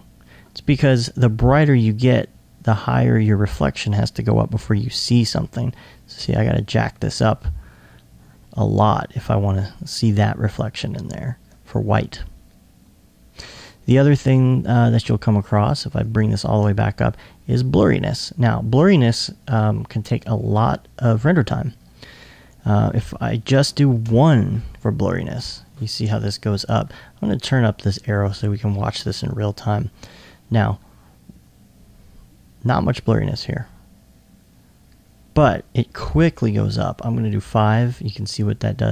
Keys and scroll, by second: 24.3 Tab.